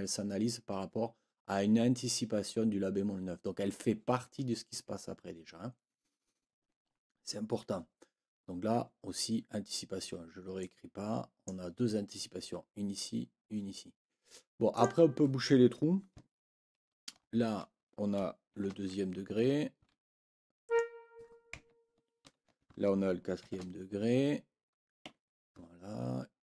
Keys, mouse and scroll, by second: 10.6-11.6 drag, 14.7 click, 16.8 ctrl+l, 19.3 Right, 20.6 Escape, 20.6 click, 22.2 ctrl+l, 25.0 Escape.